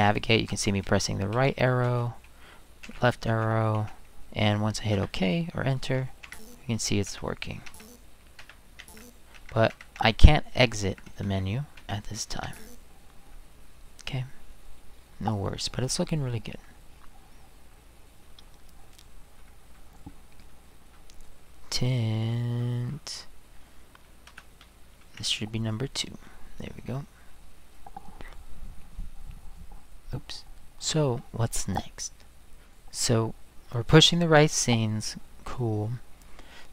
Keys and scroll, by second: 1.3 Right, 2.8 Left, 3.3 Left, 4.9 Return, 6.2 Escape, 6.7 Right, 7.1 Return, 7.6 Escape, 8.4 Return, 8.8 Escape, 9.3 Escape, 10.8 Escape, 11.2 Right, 11.9 Return, 12.4 Escape, 24.3 space, 25.1 2.